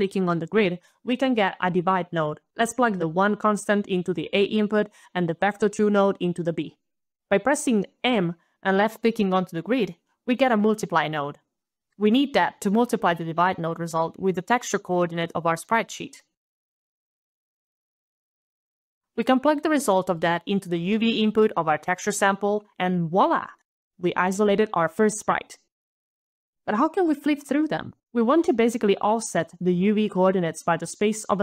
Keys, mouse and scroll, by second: 0.5 d, 0.7 click, 1.6 click, 3.2 click, 5.3 click, 6.9-8.9 typing, 7.4 click, 8.1 click, 8.9 click, 12.4 click, 14.7 click, 15.0-17.1 typing, 17.3 Return, 17.5 click, 19.5 click, 21.9 middle click, 22.2 click, 24.0 click, 25.2 scroll down 1.